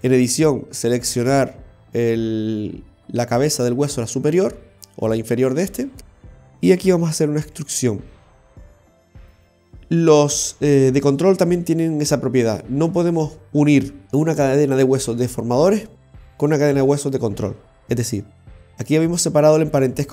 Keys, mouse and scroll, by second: 0.2 right click, 2.2 r, 7.5 e, 19.2 right click.